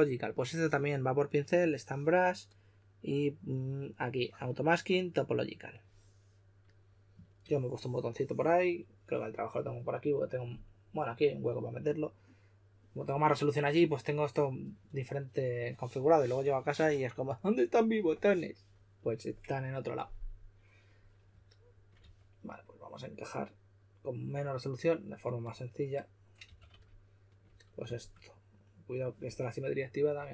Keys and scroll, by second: 21.9 2, 26.4 typing.